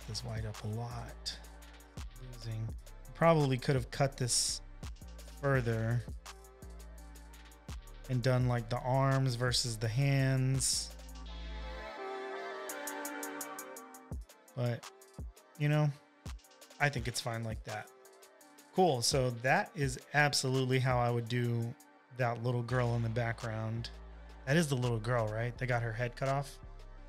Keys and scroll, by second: 19.5 super+-, 19.9 super+-, 21.9 super+=, 22.0 super+=, 26.3 space, 26.6 space.